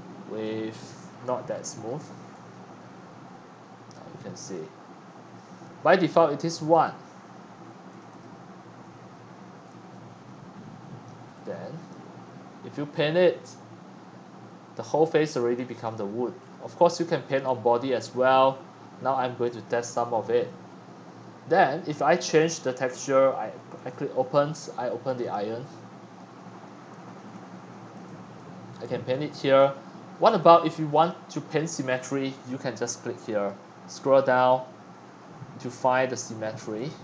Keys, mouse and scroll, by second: 0.0-1.6 drag, 2.2 click, 2.5 scroll up 1, 4.5 click, 6.8 click, 7.4 1, 8.0 click, 8.4 1, 9.3-11.0 middle drag, 11.0 click, 11.2-13.4 middle drag, 13.4-16.4 drag, 16.4-17.4 scroll up 2, 17.4-19.6 drag, 19.6-22.4 middle drag, 22.4-26.2 drag, 26.2-28.8 middle drag, 28.8-33.5 shift+drag, 33.5-35.0 scroll down 10, 35.0 drag, 35.2 scroll up 10, 36.8-37.0 drag.